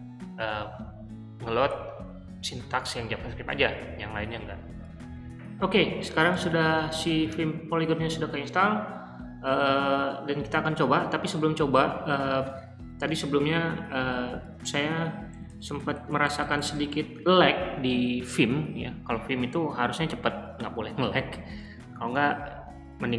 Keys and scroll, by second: 5.0 typing, 6.1-7.2 typing, 7.8 Escape, 15.3-16.9 typing.